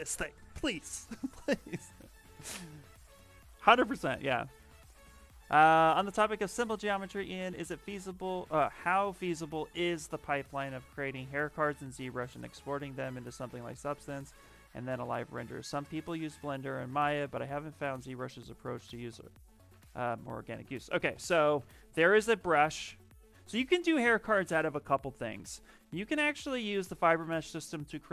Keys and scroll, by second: 21.0 ,, 22.6 ,.